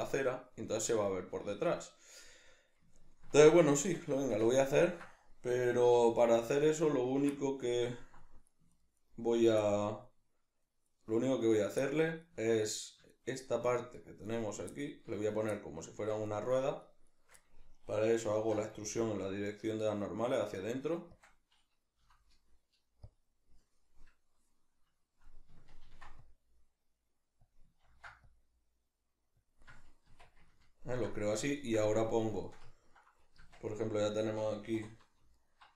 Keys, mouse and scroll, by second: 3.8 Tab, 5.9 3, 6.2 right click, 6.6 ctrl+right click, 6.9 ctrl+right click, 7.3-8.7 middle drag, 8.7 ctrl+right click, 9.0 ctrl+right click, 9.3 ctrl+right click, 9.6-13.1 middle drag, 13.1 ctrl+right click, 13.4 ctrl+right click, 13.7 ctrl+right click, 14.0 ctrl+right click, 14.3 ctrl+right click, 14.7 middle click, 15.3 ctrl+right click, 15.5 middle click, 16.3 shift+right click, 16.5 shift+right click, 16.8 shift+right click, 17.1 shift+right click, 17.4-21.3 middle drag, 18.3 alt+e, 21.3 click, 22.0 F9, 23.9-27.6 middle drag, 25.8 ctrl+r, 27.6 click, 27.8 ctrl+r, 29.5 click, 29.6-35.3 middle drag, 30.1 Tab, 33.4 Tab, 35.3 alt+right click.